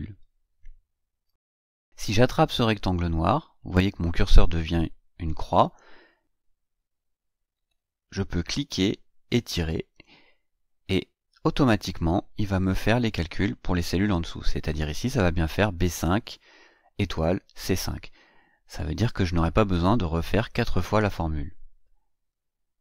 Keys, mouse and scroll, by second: 0.1 ctrl+scroll up 2, 0.7 ctrl+scroll up 2, 7.9-10.0 drag, 12.3 click, 22.6 click.